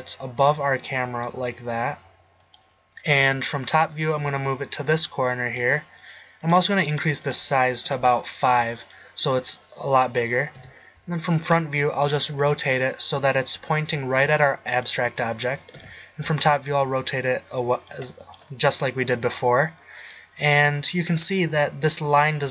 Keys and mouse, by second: 3.2 KP_7, 10.7 KP_1, 12.4 r, 15.0-15.6 drag, 16.0 KP_7, 16.7 r.